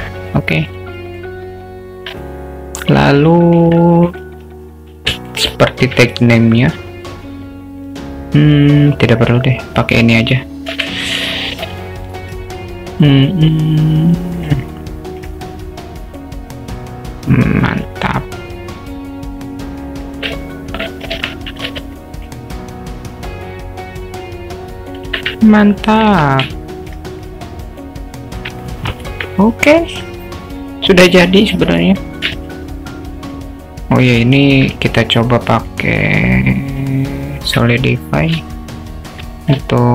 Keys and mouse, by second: 0.2 click, 0.6 click, 1.0 middle drag, 2.2-3.0 alt+middle drag, 3.4 middle click, 4.1 click, 5.4 shift+right click, 5.9 shift+a, 10.8 shift+d, 12.3 s, 14.7 alt+middle click, 15.8-20.2 drag, 20.4-21.0 middle drag, 21.2 Tab, 21.7 alt+z, 22.0 click, 23.1-25.0 drag, 25.1 alt+z, 25.6 alt+middle click, 26.5 Tab, 26.6-26.9 alt+middle drag, 27.2 click, 28.7 alt+middle click, 29.7 alt+middle click, 32.4-33.4 alt+middle drag, 34.0 drag, 34.3-34.6 alt+shift+middle drag, 35.7-37.7 drag, 38.6-39.2 alt+shift+middle drag.